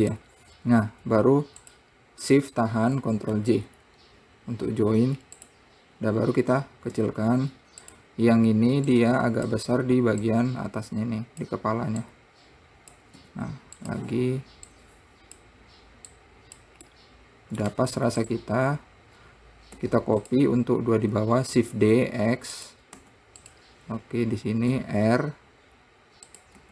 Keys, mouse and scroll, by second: 0.9-1.3 scroll down 1, 2.0 shift+click, 3.7 ctrl+j, 5.8 click, 7.4 s, 9.3-10.7 drag, 12.4 click, 13.6 s, 15.1 click, 16.5 click, 17.3 middle click, 18.1 `, 19.3-20.1 scroll up 1, 20.2 `, 22.2 shift+d, 23.4 `, 25.2 r.